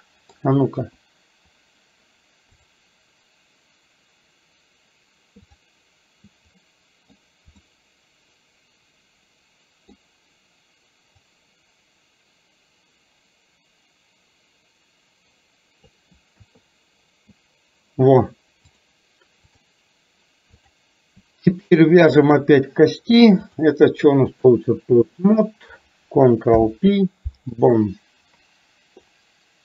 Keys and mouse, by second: 0.9 KP_1, 5.5 click, 6.6 middle click, 7.8-10.0 middle drag, 11.4 click, 11.8-16.0 drag, 16.5 KP_3, 18.8 click, 20.8 click, 23.5 click, 26.7 ctrl+p, 29.1-29.6 drag.